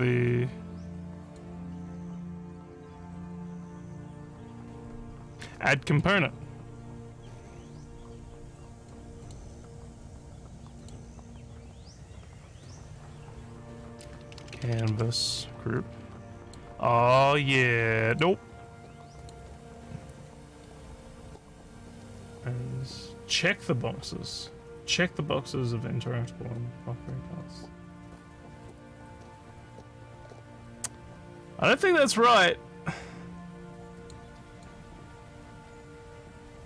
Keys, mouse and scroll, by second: 1.3 click, 6.0 click, 8.8 click, 9.3 click, 10.8 click, 14.1-15.4 typing, 16.5 click, 17.4 scroll up 1, 18.2 click, 19.2 click, 34.0 click, 34.6 click.